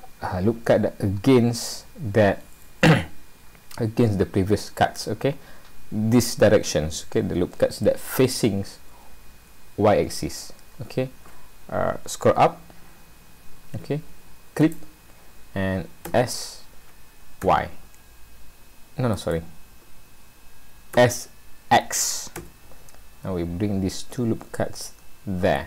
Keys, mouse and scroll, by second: 20.9 s.